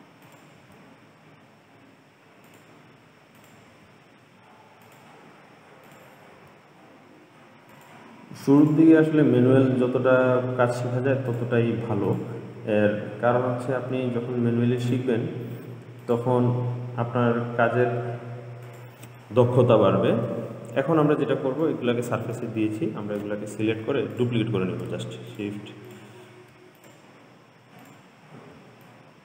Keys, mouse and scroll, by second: 0.5 click, 0.8 g, 3.6 click, 4.0 g, 6.1 click, 6.6 g, 8.9 click, 9.6 g, 12.3 click, 12.7 g, 16.3 click, 16.5 g, 19.4-20.7 middle drag, 20.7 scroll down 2, 20.9-21.3 scroll up 1, 21.9-24.4 middle drag, 24.4 click, 25.5 shift+click, 26.1 shift+click, 27.0 click, 28.1 click, 29.1 shift+drag.